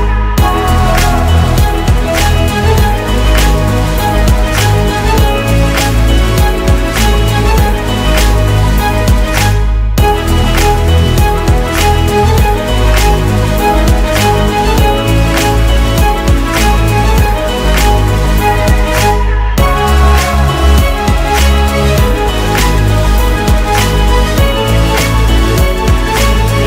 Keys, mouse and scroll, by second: 0.1 Return, 9.0-9.4 alt+scroll up 1, 11.4 typing, 11.9 Return, 13.9 typing, 14.1 Return, 15.4-16.1 typing, 17.0 alt+scroll down 1, 17.3 space, 21.0 ctrl+d, 23.6 Return, 23.8 Right, 24.0 ctrl+shift+Left.